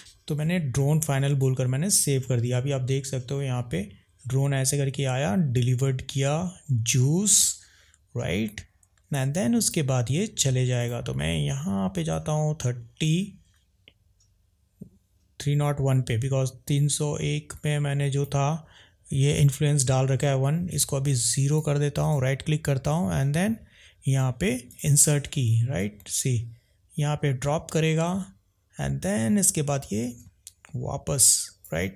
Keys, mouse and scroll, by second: 1.6 drag, 12.1 click, 20.7-21.7 drag, 22.1-24.8 right drag, 25.9 click.